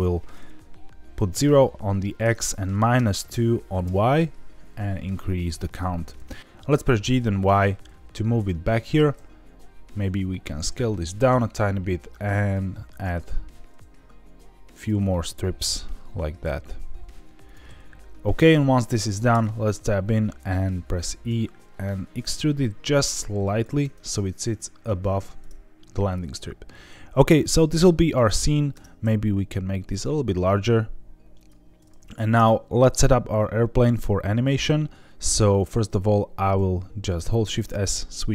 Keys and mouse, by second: 0.0-4.2 drag, 5.3 click, 5.8 click, 6.6 g, 7.4 y, 8.8 click, 9.1 s, 11.1 click, 12.4 click, 12.9 click, 14.7 click, 15.6 s, 17.4 click, 19.3 Tab, 20.9 e, 23.5 shift+click, 25.4 Tab, 28.7 Tab, 29.0 s, 31.3 click, 32.3 Tab, 36.5 shift+s.